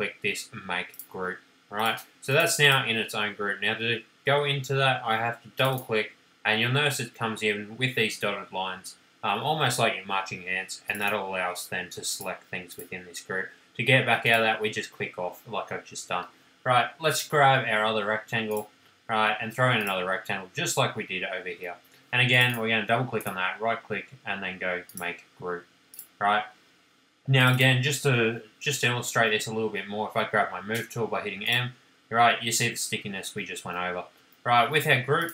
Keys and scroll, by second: 21.6 space, 29.1 m, 34.1 space.